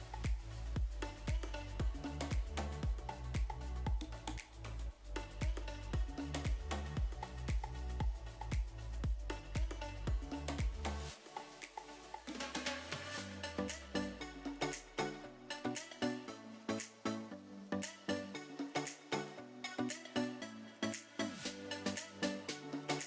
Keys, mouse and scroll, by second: 0.5 middle click, 1.2-1.6 middle drag, 2.5-3.5 drag, 4.1 middle click, 5.3-6.1 drag, 8.1 middle click, 8.9-9.9 middle drag, 10.3 click, 12.7 ctrl+space, 14.1-14.7 shift+middle drag, 14.9-20.8 middle drag, 22.6 0.